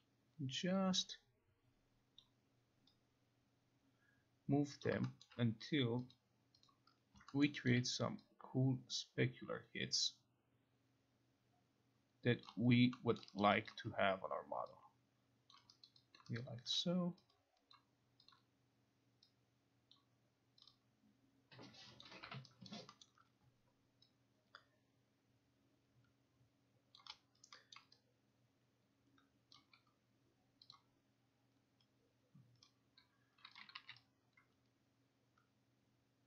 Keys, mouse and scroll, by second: 2.3 click, 4.9 click, 5.3 alt+scroll, 6.2 click, 6.7 click, 7.5 alt+middle click, 7.8 alt+right click, 12.5 click, 13.3 alt+middle click, 13.5 alt+right click, 13.7 alt+click, 15.6 click, 15.9 alt+right click, 16.2 alt+click, 16.4 alt+click, 17.4 click, 17.8 click, 18.4 click, 20.0 click, 20.7 click, 22.1 click, 22.7 alt+right click, 22.7 click, 23.1 alt+middle click, 23.1 alt+right click, 27.0 click, 27.8 alt+middle click, 29.6 alt+click, 30.8 click, 33.6 click, 33.8 e.